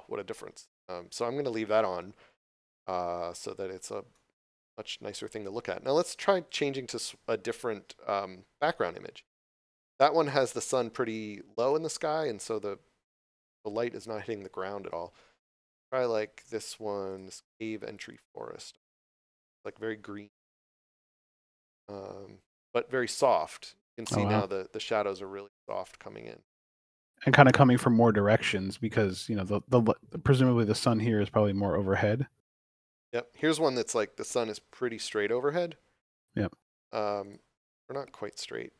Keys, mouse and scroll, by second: 6.5 click, 17.1 click, 27.2 click, 30.4 click, 37.2 click.